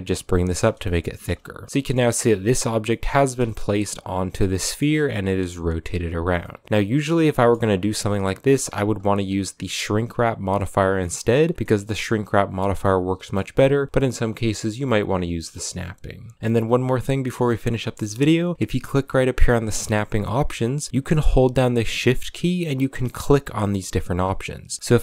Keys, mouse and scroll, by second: 0.6-1.1 shift+middle drag, 1.1-1.6 scroll down 1, 1.6 middle click, 1.7-2.4 scroll up 3, 2.4 scroll down 3, 2.6 a, 2.7-3.8 middle drag, 3.8-4.4 right drag, 4.4 middle click, 4.6 a, 6.0 right click, 6.2 scroll up 1, 6.2-6.6 middle drag, 6.6 Tab, 6.9 a, 7.1 middle click, 7.3 a, 7.5 scroll down 1, 7.7-9.9 middle drag, 9.9 click, 10.6-13.2 middle drag, 13.2 Tab, 13.5-14.0 middle drag, 14.0 Tab, 14.1-14.8 middle drag, 14.8 a, 15.0 a, 15.3-17.3 middle drag, 17.3 scroll up 2.